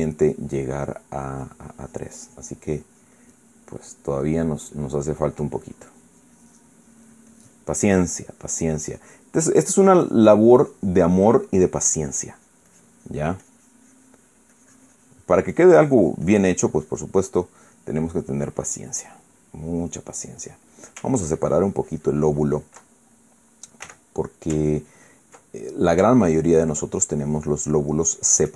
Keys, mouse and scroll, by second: 0.7 click, 1.2-10.7 drag, 10.9-15.1 drag, 15.2-17.8 drag, 17.8-21.6 middle drag, 22.0-23.5 ctrl+drag, 23.6 ctrl+middle click, 24.6 f, 25.0 ctrl+click, 25.3 ctrl+click, 26.2 ctrl+middle click, 27.0-28.5 ctrl+drag.